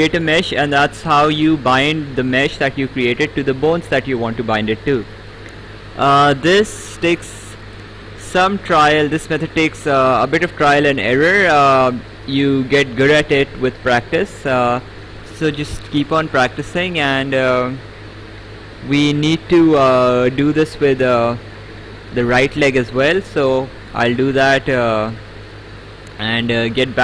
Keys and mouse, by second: 1.5 right click, 5.2 right click, 9.6 click, 11.0 click, 14.1 ctrl+z, 15.8 right click, 22.3 click, 23.1 right click.